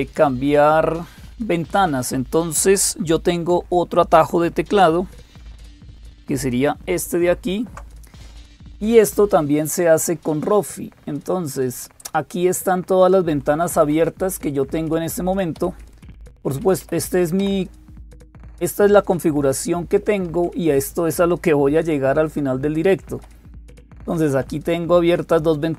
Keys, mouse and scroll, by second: 0.0-25.7 typing, 6.9 alt+super+Tab, 12.2 Down, 12.5 Down, 12.7 Down, 12.9 Down, 13.1 Down, 13.5 Down, 13.6 Down, 13.9 Down, 14.9 Up, 15.4 Up, 15.8 Down, 15.8 Up, 16.1 Up, 16.6 Up, 20.1 Down, 22.9 Up, 24.2 Down, 25.4 Down.